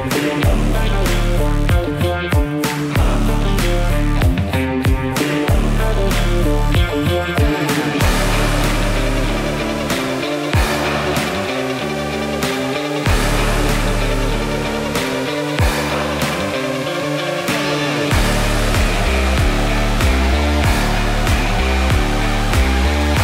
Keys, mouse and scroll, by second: 0.0-0.5 typing, 0.7 Return, 3.0 click, 3.4 typing, 8.9-10.0 typing, 9.4 Tab, 13.7 click, 15.1 typing, 16.8 typing, 18.2 Return, 20.3 click, 20.9-21.6 typing, 22.9 click, 23.0 click.